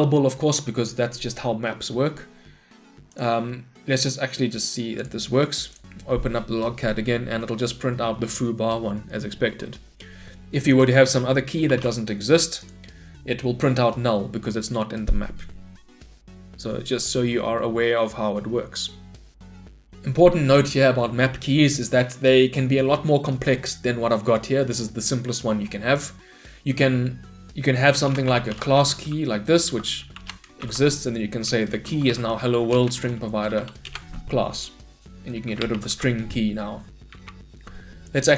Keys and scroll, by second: 0.1 Escape, 3.2 shift+F10, 12.7 shift+F10, 30.3 Return, 35.9 ctrl+y.